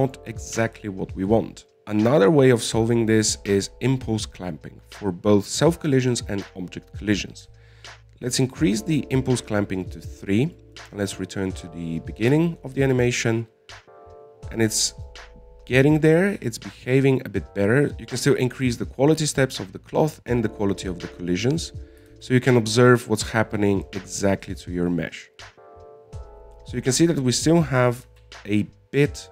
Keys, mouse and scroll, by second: 0.2-1.9 middle drag, 8.5-11.6 drag, 11.8-14.1 drag, 14.1 alt+a, 15.4-17.5 middle drag, 17.5 alt+a, 17.8 middle click, 17.9-19.2 scroll down 10, 19.2-20.1 scroll down 1, 20.1-20.5 scroll down 1, 20.5-21.5 drag, 21.5-22.9 middle drag, 22.9 click, 23.4 alt+a, 25.4-28.7 middle drag.